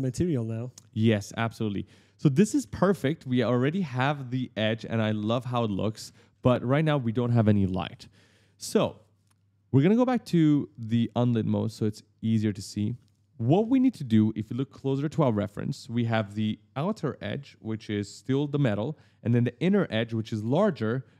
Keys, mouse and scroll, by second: 0.0-3.7 typing, 0.0 click, 0.3 right click, 0.8 right click, 1.1 right click, 1.3 right click, 1.6 right click, 2.3 right click, 2.6 right click, 3.4 right click, 3.7 right click, 3.7 right click, 4.1 right click, 4.6 right click, 5.1 right click, 5.7 right click, 5.8 right click, 5.9 right click, 6.1 right click, 6.2 right click, 9.1 click, 10.8 click, 11.4 click, 11.8-13.1 typing, 12.0 right click, 12.4 right click, 15.5 scroll down 1, 16.0-17.5 scroll up 1.